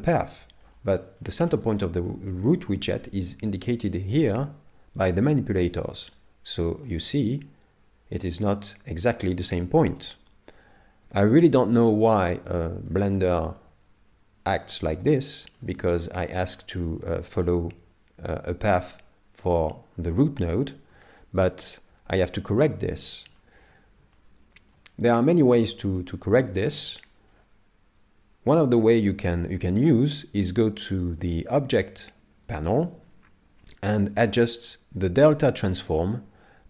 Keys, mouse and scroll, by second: 0.2 middle click, 1.0 shift+middle click, 1.5-2.1 scroll up 4, 2.1 middle click, 6.2 middle click, 6.9 shift+middle click, 11.0 KP_7, 11.9-12.6 scroll down 2, 12.6 shift+middle click, 15.4 shift+middle click, 16.0 middle click, 21.5 KP_7, 23.4 shift+middle click, 24.1 shift+middle click, 26.0 shift+middle click, 27.1 shift+middle click, 32.1 click.